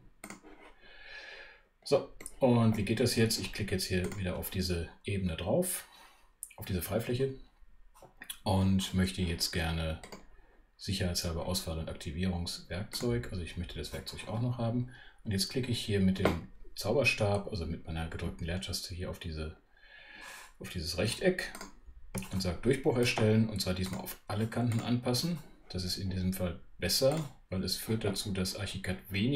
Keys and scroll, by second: 18.1 space.